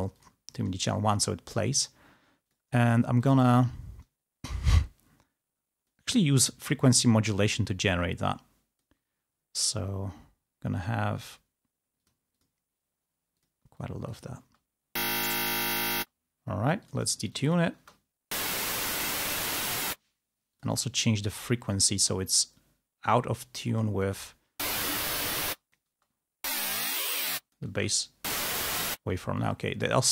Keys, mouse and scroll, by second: 0.2 click, 0.6 click, 2.5 click, 3.4 click, 5.1 click, 6.7-9.2 drag, 11.3 click, 12.0 click, 13.4 click, 13.9 click, 14.5 space, 16.0 space, 16.8-17.9 drag, 17.9 space, 20.2 space, 20.7 click, 23.6 click, 24.2 space, 25.5 space, 25.8 click, 27.6 click, 27.6 space, 29.0 space, 29.4 click.